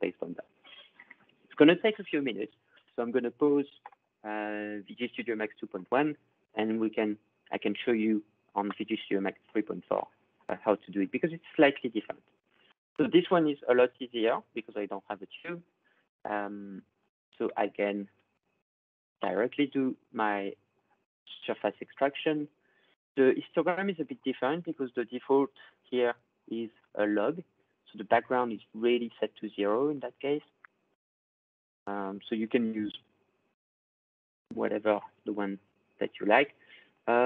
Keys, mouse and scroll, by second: 8.8-9.8 drag, 10.9 click, 12.4 click, 16.9 click, 17.8-18.2 ctrl+scroll, 19.2 click, 22.9-24.3 drag, 25.8-30.0 drag, 30.8 click, 31.7 click, 34.4-35.9 ctrl+scroll.